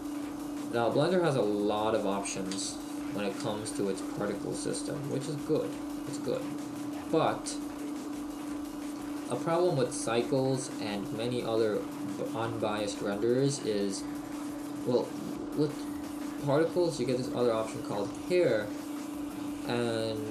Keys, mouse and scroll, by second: 0.0-0.6 scroll down 1, 2.6 scroll down 10, 2.6 t, 3.5 n, 5.2 click, 8.0-8.5 scroll down 4, 8.5 middle click, 19.9 click.